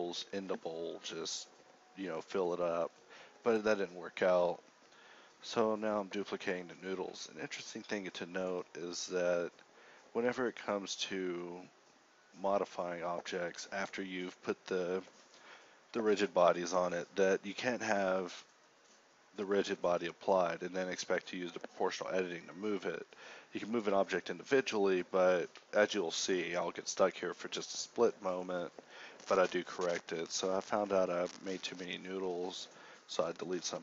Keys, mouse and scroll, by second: 5.5 shift+a, 10.5 shift+a, 11.3 b, 17.3 shift+x, 20.1 x, 20.9 x, 22.4 a, 23.1 a, 23.1 b, 26.7 ctrl+z, 31.0 ctrl+z, 31.7 a, 32.7 h.